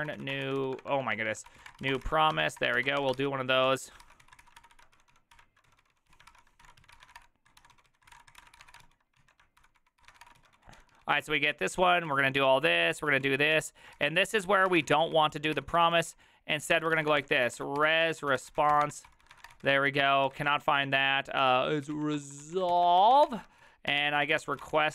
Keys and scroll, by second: 0.0-24.9 typing, 4.1 ctrl+c, 7.0 ctrl+c, 7.2 Return, 9.2 ctrl+o, 9.6 ctrl+n, 9.8 ctrl+s.